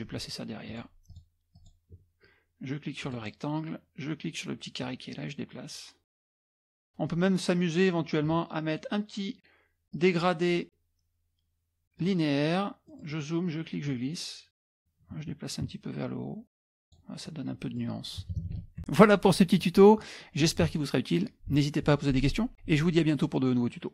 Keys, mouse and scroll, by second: 0.7-2.1 drag, 3.1 click, 4.8-6.3 drag, 9.9 click, 12.0 click, 12.6-13.7 middle drag, 13.9-17.3 drag, 17.3 middle click, 18.2 middle click, 18.3 KP_Subtract, 18.5 KP_Subtract, 18.5 middle click, 18.6 KP_Subtract.